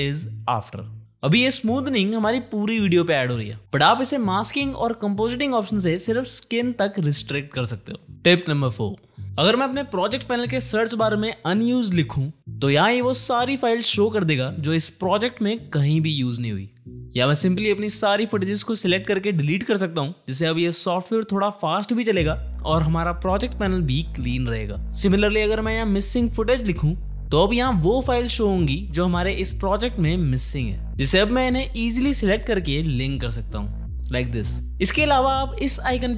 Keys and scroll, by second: 0.8 shift+/, 3.0 g, 3.8 ctrl+z, 11.2-13.2 typing, 19.4 Delete, 20.3 Return, 24.1 Delete, 24.4 Return, 25.4-27.3 typing, 31.1 Escape, 32.1 ctrl+c, 32.2 alt+d, 32.5 ctrl+v, 32.7 Return.